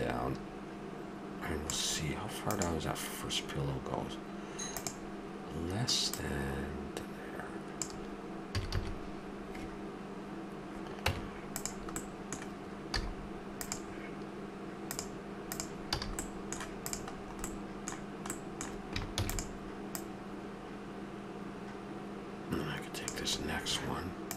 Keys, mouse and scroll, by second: 6.0-7.9 drag, 8.5 a, 8.7 a, 11.0 Tab, 12.0-14.2 middle drag, 12.9 z, 14.8-15.5 drag, 15.9 a, 17.6 middle click, 19.1 shift+d.